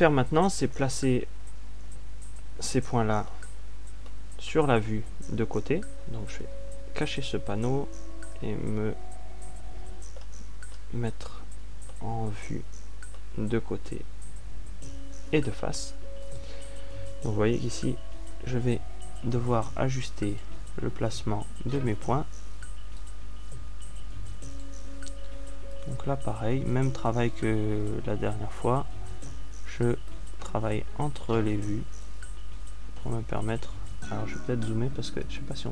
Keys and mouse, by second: 8.1 t, 9.8 ctrl+alt+q, 9.8-11.1 middle drag, 11.3 middle click, 13.3-17.9 middle drag, 21.6 click, 24.5-26.7 drag, 27.9-31.6 middle drag, 31.8-33.7 drag, 33.7-35.7 middle drag.